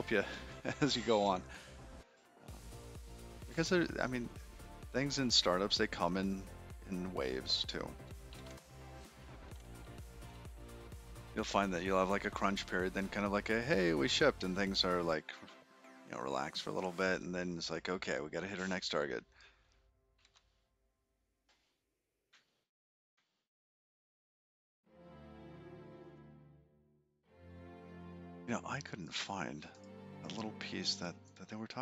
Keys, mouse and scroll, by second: 23.4 shift+middle click, 29.9 click, 31.7 click.